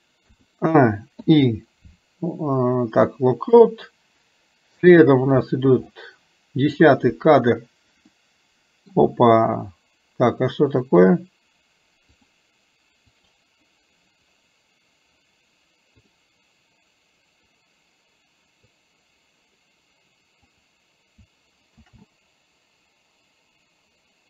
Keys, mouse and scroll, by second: 6.9 drag, 8.3-9.0 middle drag, 10.9 click, 12.2 click, 13.3 click, 16.0 click, 18.9 click, 20.5 click.